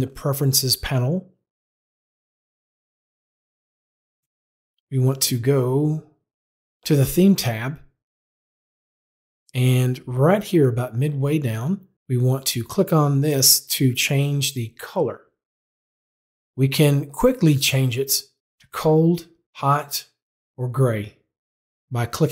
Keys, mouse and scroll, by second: 2.7 click, 4.1 click, 5.5 click, 18.4 click, 19.4 click, 20.5 click.